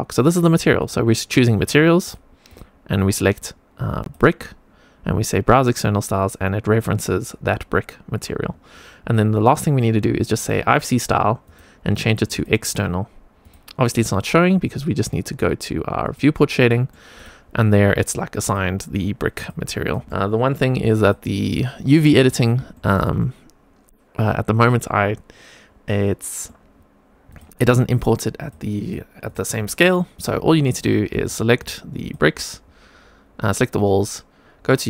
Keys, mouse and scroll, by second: 11.4-12.4 drag, 13.3 click, 16.0 click, 16.6 middle click, 17.1 click, 17.8 scroll up 2, 18.4 click, 19.3 click, 19.8 click, 20.0 middle click, 21.0-22.2 drag, 22.3 scroll down 1, 22.6 shift+middle click, 23.1-26.4 middle drag, 27.2 click, 27.9 click, 28.3 click, 28.8 click, 29.2 click, 30.1 click, 30.6 middle click, 31.2-32.2 shift+drag.